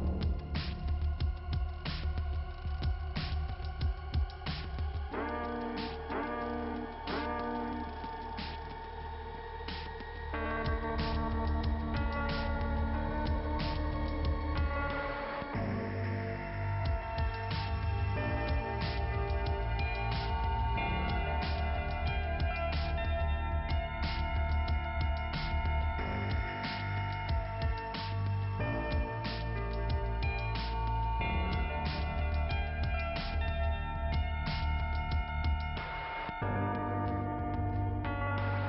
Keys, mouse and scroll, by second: 1.5 click, 2.6 click, 3.1-4.2 scroll down 2, 4.2 click, 10.7-11.4 scroll down 1, 12.0 click, 13.4 click, 14.0 click, 14.8 click, 17.9-18.3 scroll up 2, 18.9 click, 19.7 click, 20.5 click, 21.8 click, 21.9 click, 22.6 click, 23.0 scroll down 2, 23.5 click, 25.8 click, 34.3 middle click, 37.2 click, 38.4 click.